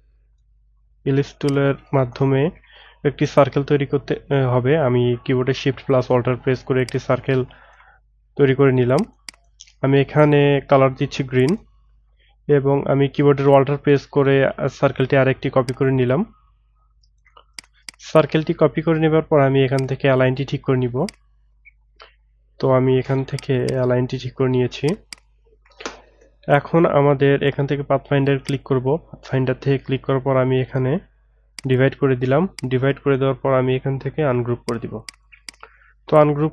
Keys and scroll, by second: 24.1 Right.